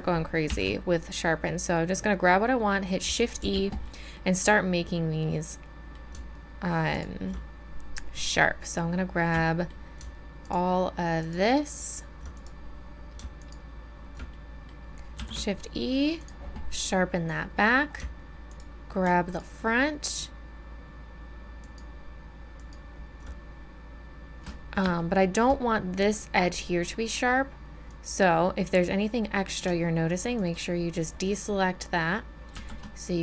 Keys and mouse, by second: 0.5 shift+e, 3.4 z, 3.8 click, 6.9-9.4 middle drag, 10.4 middle click, 15.1 shift+e, 18.5-24.5 drag, 25.1-27.1 drag, 27.9-30.3 drag, 32.5 shift+e.